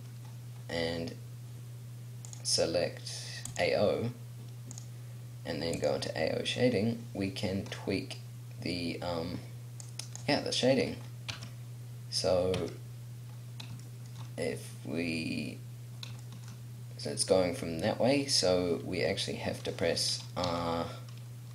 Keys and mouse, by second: 2.3-4.7 drag, 9.9 click, 10.1-11.3 middle drag, 11.3 Tab, 12.6 Tab, 20.5 r.